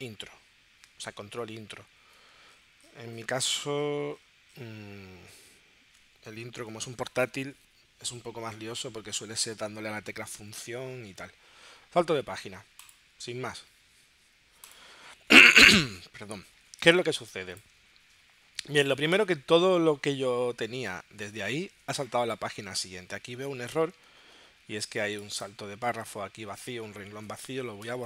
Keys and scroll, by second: 16.8 space.